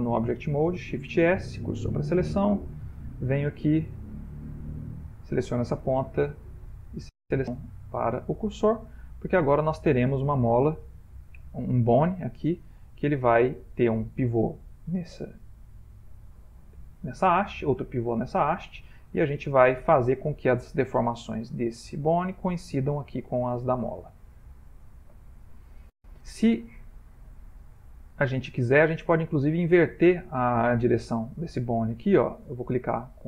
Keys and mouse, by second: 0.8 shift+s, 2.7 click, 4.3 Tab, 4.8 click, 5.9 shift+s, 9.1 middle click, 9.1 typing, 19.6 click, 23.5 middle click, 23.8 middle click, 24.0 middle click, 28.3 middle click, 30.4 middle click, 30.6 middle click, 32.5 right click.